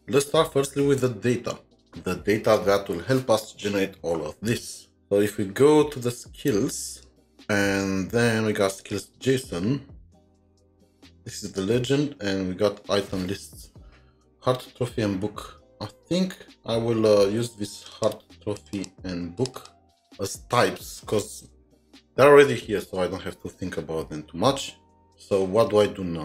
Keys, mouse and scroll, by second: 17.9 ctrl+shift+2, 18.6 double click, 18.7 double click, 19.4 double click, 19.5 double click.